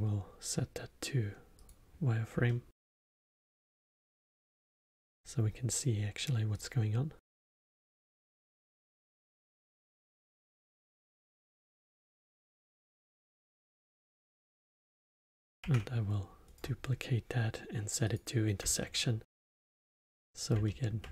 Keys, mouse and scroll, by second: 2.4-4.6 alt+middle drag, 4.6 click, 6.5 click, 7.4-10.4 drag, 11.6 click, 14.2 alt+middle click, 14.7 click, 15.6 shift+d, 18.0 click, 18.7-21.1 alt+middle drag.